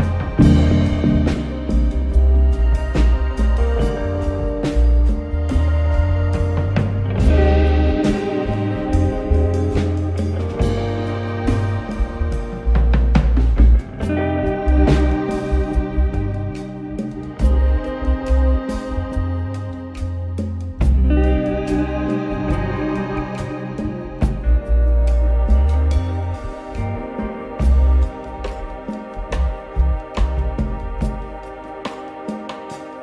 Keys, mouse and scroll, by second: 0.2 ctrl+KP_3, 1.8 click, 3.3-4.1 scroll up 6, 4.1 Tab, 4.5 click, 4.8-5.8 scroll down 1, 5.8 b, 7.4 click, 8.5 scroll up 2, 9.7 click, 11.8 click, 12.1-12.5 scroll down 1, 12.5 b, 14.2 click, 15.3-16.9 scroll up 7, 17.1 click, 19.5 click, 19.7-20.1 scroll down 1, 20.1 b, 21.7 click, 24.7 click, 25.9 b, 27.3 click, 28.4-29.6 scroll up 5, 29.6 click, 30.4 scroll up 2, 31.7 click.